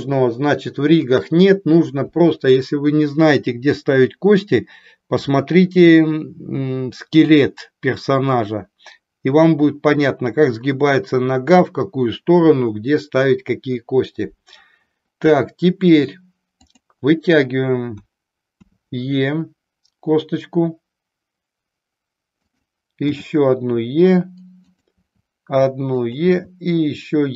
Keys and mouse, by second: 16.7 click, 22.4 click, 24.9 e, 26.1 click.